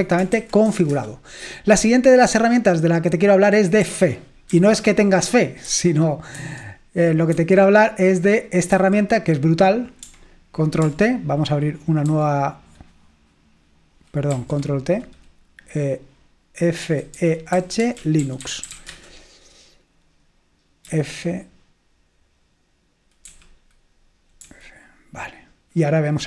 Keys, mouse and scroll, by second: 0.2-1.3 typing, 3.7-5.0 typing, 5.7 super+2, 6.4 super+1, 7.4 super+7, 8.9 super+8, 12.1 ctrl+y, 14.5 ctrl+t, 16.7-19.3 typing, 21.4 g, 23.4 typing, 24.5 typing.